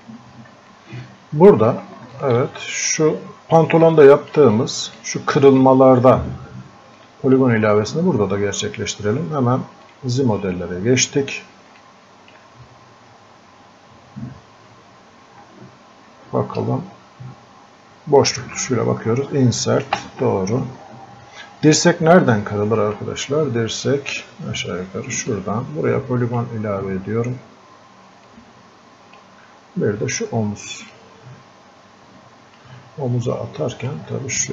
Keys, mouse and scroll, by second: 0.8-2.2 drag, 4.0 alt+click, 4.6-7.0 drag, 7.0-9.8 drag, 9.9 click, 10.6-11.3 scroll up 1, 11.3 scroll down 1, 11.8-16.6 alt+drag, 16.6 space, 22.2-25.3 drag, 25.3-33.4 drag, 33.4-34.5 drag.